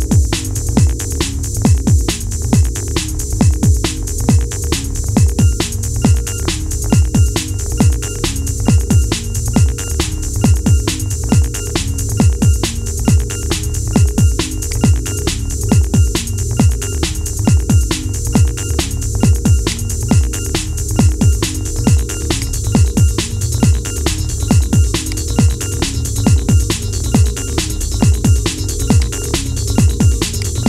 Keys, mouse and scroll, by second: 5.6 ctrl+s, 7.3-7.9 scroll down 2, 7.9-8.4 shift+middle drag, 8.4 scroll up 3, 9.2-12.1 shift+middle drag, 12.1-12.6 scroll down 4, 12.6-14.4 middle drag, 14.4 click, 14.9-15.3 scroll up 4, 15.3-16.3 middle drag, 16.3 KP_1, 17.5-18.6 scroll down 2, 18.7 shift+s, 22.7-23.5 scroll down 2, 23.5 s, 25.4-25.8 scroll up 3, 25.8-26.2 shift+middle drag, 26.2 scroll up 3, 27.2 g, 29.2-30.1 scroll down 3, 30.1 click.